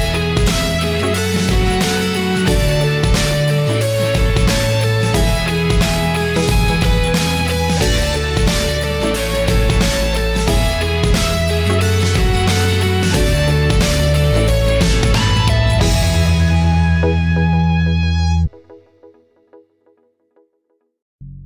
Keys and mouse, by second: 0.0-2.8 drag, 4.1-6.5 middle drag, 11.6 click, 12.0-14.8 middle drag, 15.2-16.9 middle drag, 17.3-18.5 right drag, 19.4-21.4 middle drag.